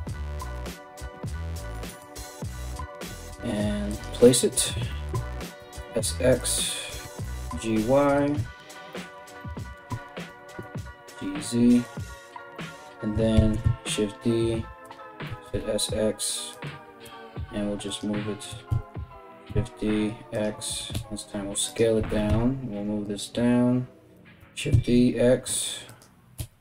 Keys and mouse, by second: 0.0-0.1 typing, 2.2 g, 5.2 s, 6.6 g, 9.9 g, 12.9 shift+d, 14.8 s, 16.6 g, 18.3 shift+d, 20.5 s, 21.6 g, 24.0 shift+d, 25.9 s.